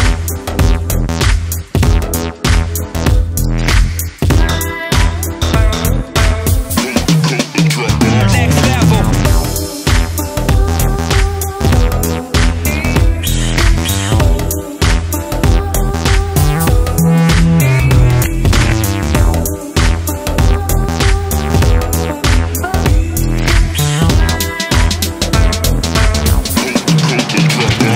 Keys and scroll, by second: 6.6-8.3 typing, 25.0-26.0 typing.